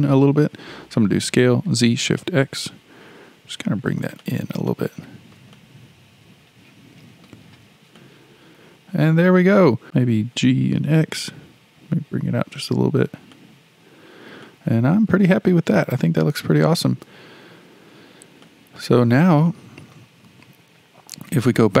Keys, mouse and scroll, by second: 1.2 s, 4.7-7.6 shift+middle drag, 7.6-8.0 scroll down 2, 8.0-9.8 middle drag, 9.8 scroll up 4, 10.4 g, 14.0-14.4 scroll down 2, 14.4-18.0 shift+middle drag, 18.0-18.4 scroll down 1, 18.4-18.9 shift+middle drag, 18.9-19.5 scroll down 4, 19.5-21.8 middle drag.